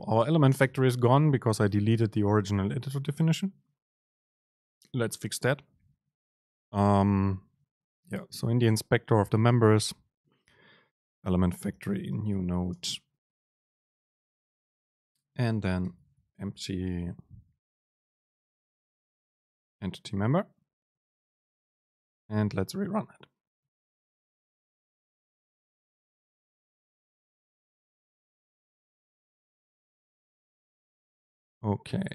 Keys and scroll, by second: 11.2 Return, 12.8 Return, 12.8 super+space, 15.2 Right, 16.6 BackSpace, 17.9 BackSpace, 17.9 super+space, 21.4 ctrl+shift+super+F9.